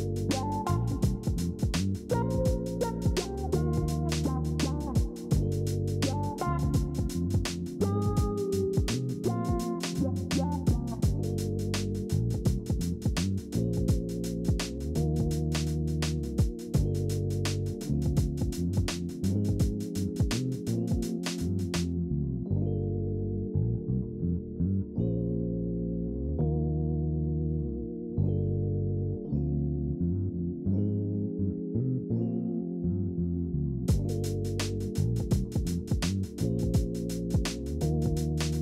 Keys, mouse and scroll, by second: 15.5 ctrl+g, 18.7 ctrl+z.